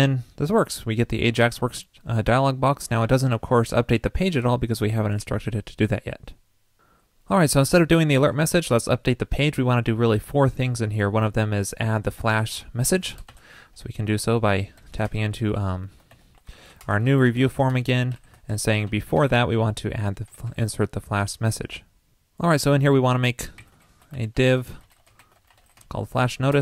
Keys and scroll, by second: 7.6 super+a, 23.6 ctrl+shift+<.